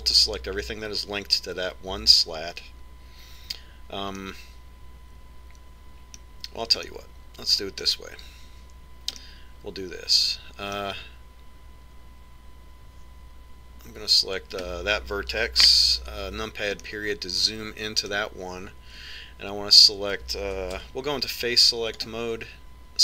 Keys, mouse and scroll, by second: 0.7 l, 5.2-6.9 middle drag, 7.9-9.5 middle drag, 10.2-11.9 middle drag, 15.5-16.8 right drag, 16.6 KP_Decimal, 17.8-19.9 middle drag, 21.8 ctrl+Tab.